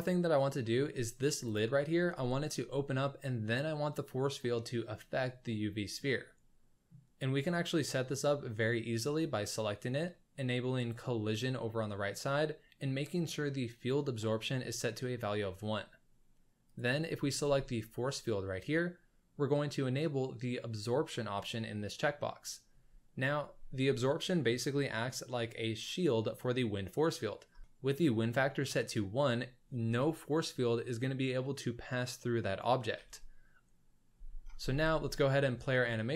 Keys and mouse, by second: 0.6 middle click, 1.4 click, 6.0-6.9 middle drag, 10.8 drag, 17.3 z, 21.4 click, 28.0 click, 34.1 z, 34.6 space, 35.6 shift+click.